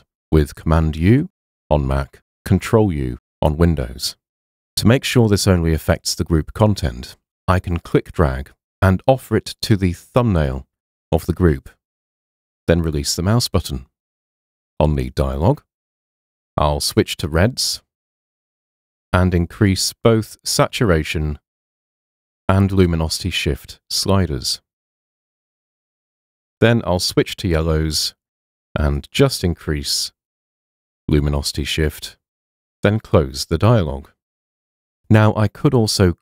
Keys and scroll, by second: 1.1 super+u.